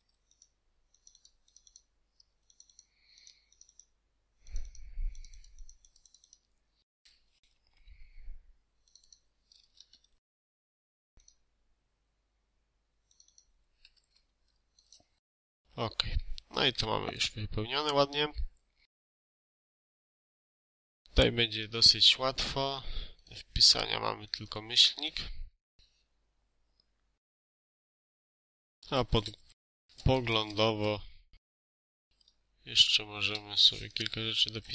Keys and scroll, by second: 7.1 Escape, 9.7 ctrl+a, 10.5 ctrl+v, 13.8 ctrl+a, 14.1 ctrl+v, 19.4 space, 20.2 Escape, 25.3 KP_Subtract, 28.5-29.6 typing, 32.0 KP_Subtract, 33.1-34.7 typing.